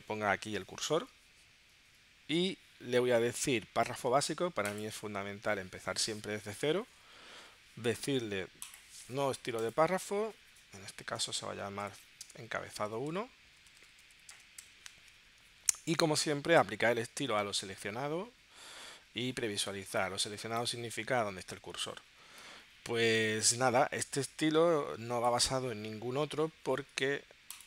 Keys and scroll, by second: 11.2 0.